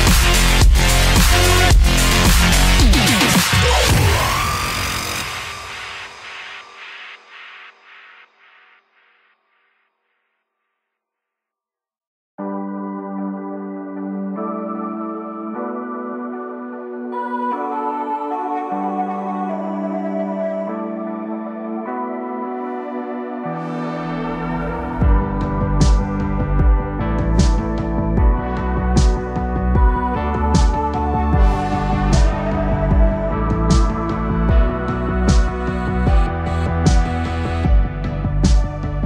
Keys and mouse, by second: 2.4-4.1 middle drag, 4.8 KP_3, 8.7 a, 8.9 a, 9.9 c, 16.8 c, 20.1 g, 23.8 a, 24.1 a, 25.0 c, 29.0 KP_3, 30.6 c, 33.8 g, 37.1-39.0 typing.